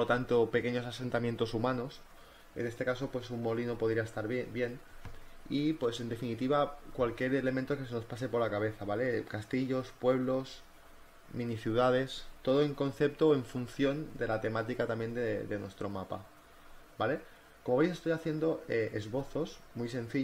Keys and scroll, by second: 1.1-3.2 typing, 4.3 ctrl+z, 4.9 ctrl+z, 7.6 e, 9.0-11.7 typing, 10.9 Return, 12.8 ctrl+z, 13.1 ctrl+z.